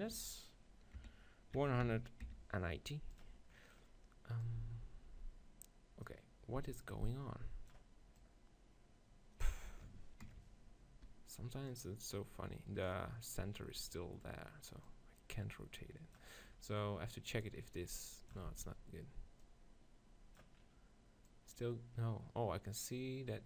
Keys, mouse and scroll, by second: 3.6 middle click, 4.4-6.4 drag, 8.2-10.1 drag, 11.7-13.5 drag, 14.9-16.7 drag, 16.7 middle click, 17.5-18.6 drag, 18.6 ctrl+z, 21.6-23.2 drag.